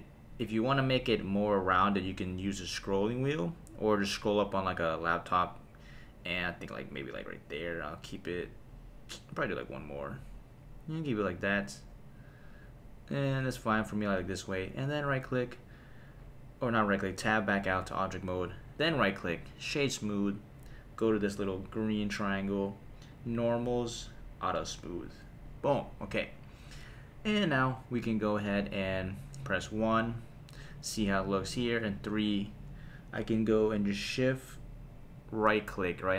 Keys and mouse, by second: 13.8 click, 15.1 Tab, 18.7 right click, 21.6 click, 23.1 click, 24.6 click, 25.4 click, 29.4 KP_1, 31.6 KP_3, 35.8 shift+right click.